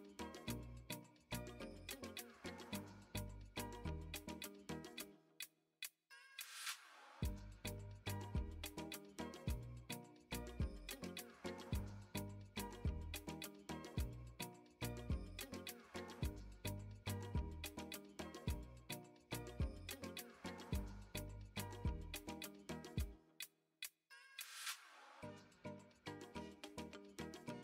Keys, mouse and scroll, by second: 3.8 click, 4.7 ctrl+b, 8.4 middle click, 9.5 2, 9.9 click, 11.9 x, 13.2 middle click, 14.3 click, 14.8 shift+click, 15.4 shift+click, 15.6 x, 17.4 x, 19.0 middle click, 20.1 middle click, 20.6 shift+middle click, 22.2-24.8 drag, 25.9 3, 26.0 click, 26.3 middle click, 27.3-27.6 drag.